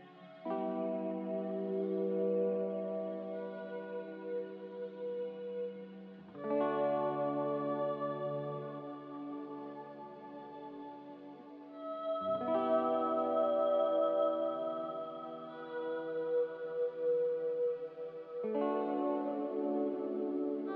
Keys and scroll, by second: 7.3-8.2 typing, 9.4-10.7 typing, 13.7-14.6 typing.